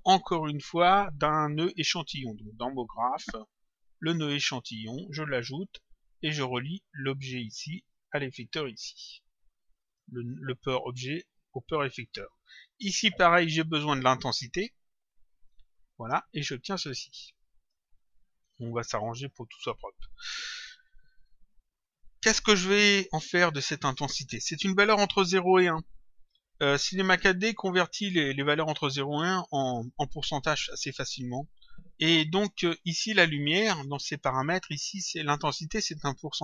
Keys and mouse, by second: 3.1 click, 6.8 click, 9.3 click, 13.3 click, 16.1 click, 18.5 click, 20.1 click, 28.7 click, 32.9 click.